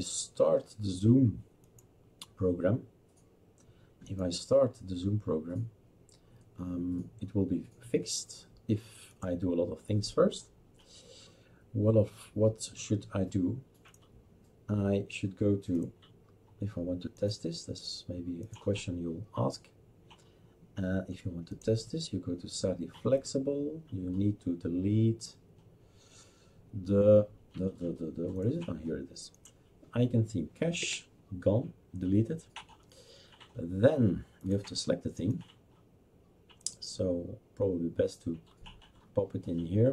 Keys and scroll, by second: 30.8 Delete.